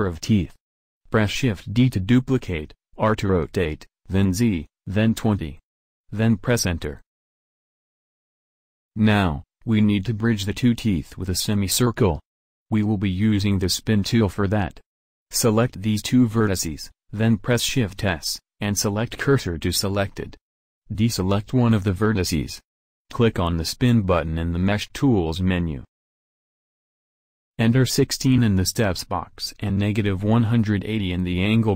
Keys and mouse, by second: 0.5 shift+d, 6.7-18.0 drag, 16.5 shift+s, 21.1-22.5 drag, 22.5 middle click, 23.0-31.7 drag.